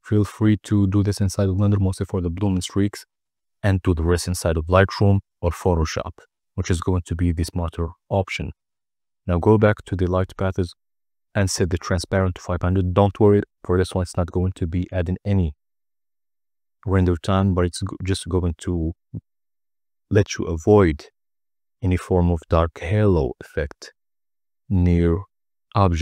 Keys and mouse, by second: 0.2-1.7 drag, 4.3 n, 8.0-17.2 drag, 9.4 0.